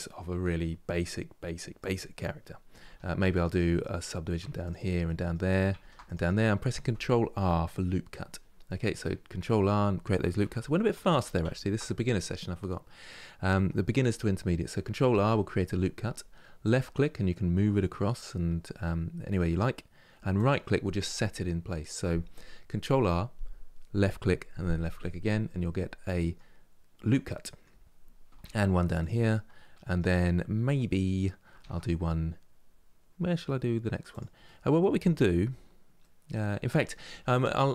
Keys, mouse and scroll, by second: 0.1-0.5 scroll down 1, 0.5-2.5 middle drag, 2.5 ctrl+r, 3.5 middle click, 4.1 ctrl+r, 4.7 middle click, 5.5 ctrl+r, 8.0-8.3 scroll down 1, 8.3-10.3 middle drag, 10.3 ctrl+z, 10.6 ctrl+z, 14.8 ctrl+r, 25.1-28.1 middle drag, 28.1 ctrl+r, 29.0-31.3 middle drag, 31.3 ctrl+r, 34.1-37.7 middle drag.